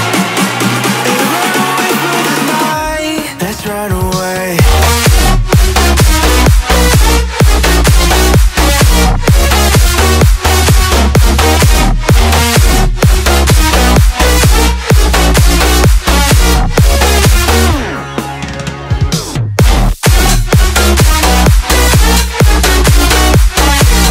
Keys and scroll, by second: 17.7-19.7 typing, 21.9-24.1 typing.